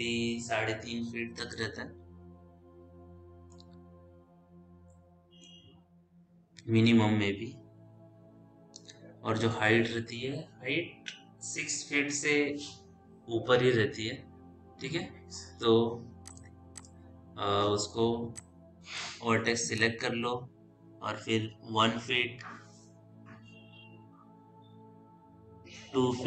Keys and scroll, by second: 8.6 w.